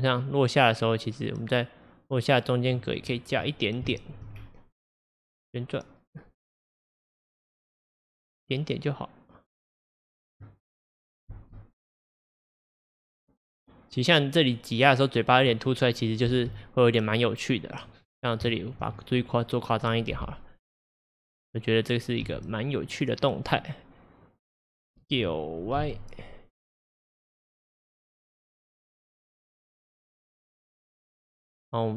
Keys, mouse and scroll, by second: 3.0 scroll, 3.9-4.4 shift+middle drag, 4.4-4.8 scroll, 5.5 click, 10.9-11.3 scroll, 11.3 space, 16.4 space, 17.0-18.1 drag, 18.1-18.5 scroll, 18.5-18.9 shift+middle drag, 18.9-19.5 scroll, 20.9 click, 22.3 g, 25.1 s, 30.0-31.9 middle drag.